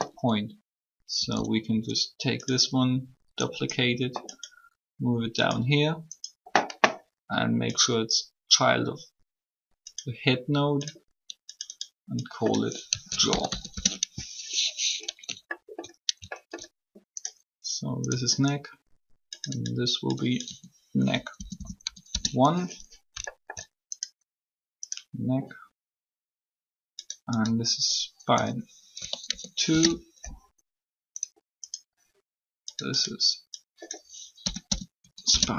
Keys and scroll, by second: 1.1 shift+d, 12.6-14.0 typing, 20.4-21.7 typing, 22.0 Return, 28.4-29.5 typing, 29.6 Return, 34.2-34.9 typing, 35.0 Return.